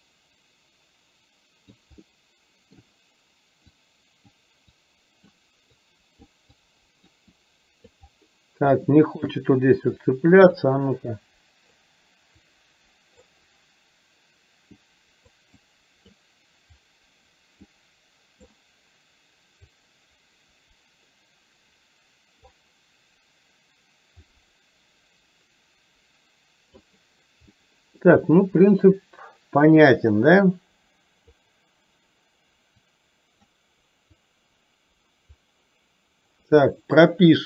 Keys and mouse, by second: 2.0 middle click, 3.7 click, 5.0 click, 6.0 click, 6.8 click, 7.4 click, 8.9 shift+middle click, 10.1 click, 11.3 click, 12.5 click, 14.8 click, 15.8 click, 16.9 click, 17.7 click, 19.8-22.5 drag, 24.3-26.9 drag, 27.6 middle click, 30.2-31.4 drag, 32.9 click, 34.3-35.4 drag.